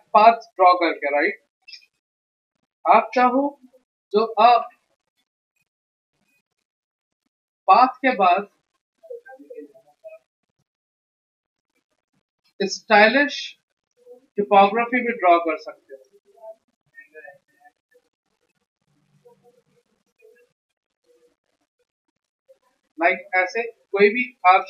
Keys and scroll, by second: 3.3 p, 10.5 x, 22.8 v, 23.7 a.